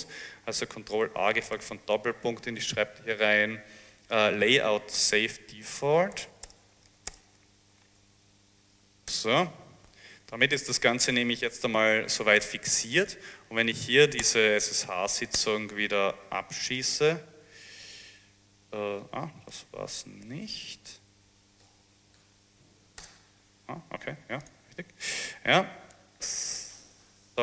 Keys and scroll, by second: 1.0 ctrl+a, 1.6 ctrl+shift+., 5.0-8.9 typing, 9.1 Return, 13.6-14.5 typing, 14.6 Up, 15.4 Return, 20.9-22.6 typing, 23.1 Return, 27.0 s, 27.3 s.